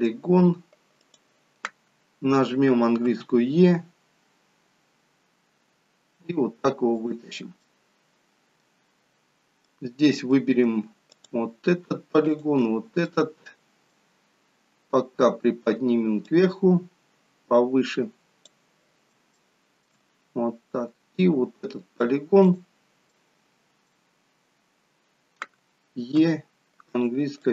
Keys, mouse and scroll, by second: 1.0 click, 3.0 e, 7.6 middle click, 9.3-9.7 scroll down 1, 9.7 middle click, 11.0 click, 12.2 shift+click, 13.0 middle click, 14.0-14.4 scroll down 3, 16.1 click, 19.4 shift+middle click, 20.2-20.6 scroll up 3, 21.4 middle click, 22.3 click, 23.0 middle click, 26.1 e, 27.4 click.